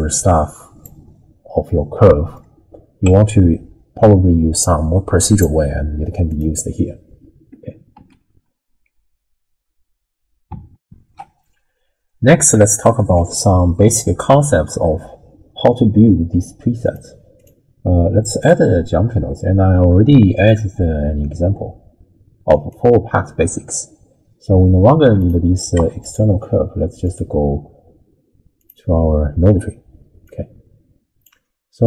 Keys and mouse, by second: 1.8 middle click, 3.0 Tab, 4.6 click, 6.4-8.0 drag, 8.0 n, 10.8 ctrl+alt+shift+w, 11.2 ctrl+alt+shift+q, 13.2 t, 16.8 click, 17.4-18.5 drag, 20.3-22.7 drag, 25.2 click, 25.8 x, 27.1 click, 28.6 click, 30.2-31.2 drag.